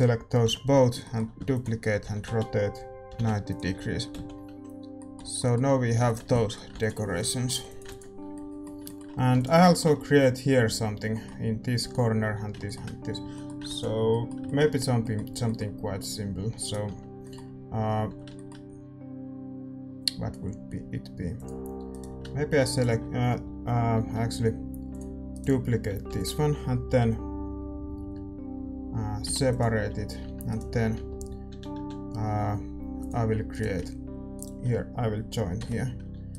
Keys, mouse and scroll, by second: 0.4 l, 1.4 shift+d, 2.0 r, 4.1 z, 4.5 Tab, 4.9-12.6 middle drag, 5.2 z, 6.3 ctrl+s, 7.6 click, 8.3 ctrl+s, 9.6 ctrl+s, 14.0 ctrl+s, 16.6 click, 16.6-21.3 right drag, 16.9 Tab, 17.2 middle click, 17.3 click, 17.4 middle click, 18.0-24.0 drag, 18.0 a, 21.9-24.9 right drag, 24.0 a, 24.9-29.6 drag, 25.3-29.6 right drag, 26.1 shift+d, 29.6 p, 30.2 Tab, 30.5-32.9 right drag, 31.4 a, 31.7 a, 32.9-35.5 drag, 33.5-36.3 right drag, 35.5 j.